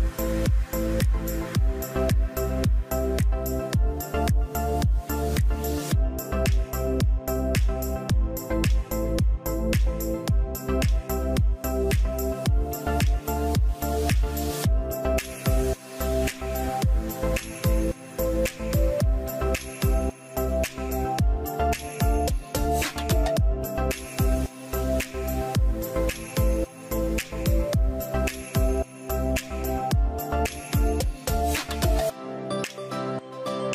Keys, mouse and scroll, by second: 7.1-10.5 middle drag, 7.1-8.7 scroll down 1, 8.7-10.5 scroll down 1, 19.8-21.8 middle drag, 19.8-21.8 scroll down 1.